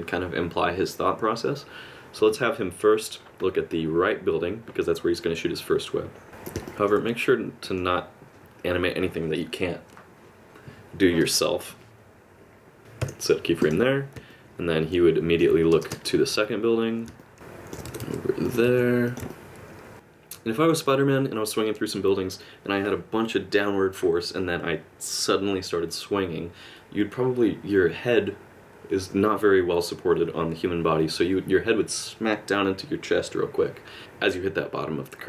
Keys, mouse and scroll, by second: 6.3 g, 6.6 middle click, 7.0 r, 12.8 middle click, 13.0 i, 14.3 middle click, 15.7 space, 15.9 space, 17.2 middle click, 17.3 alt+g, 17.9 r, 18.6 r, 19.3 middle click.